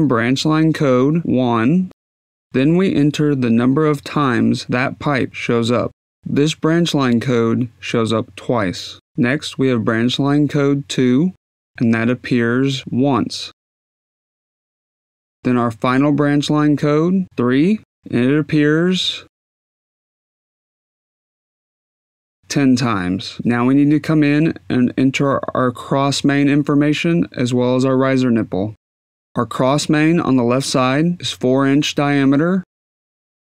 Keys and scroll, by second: 2.5 1, 2.9 Tab, 8.9 2, 9.5 Tab, 11.7 2, 15.1 Tab, 15.4 1, 15.7 Tab, 17.7 3, 22.6-23.5 typing.